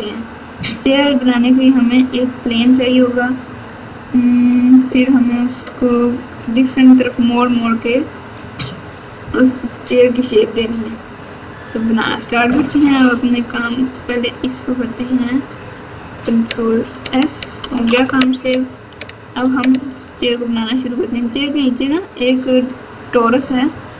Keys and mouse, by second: 14.2 click, 16.7 ctrl+s.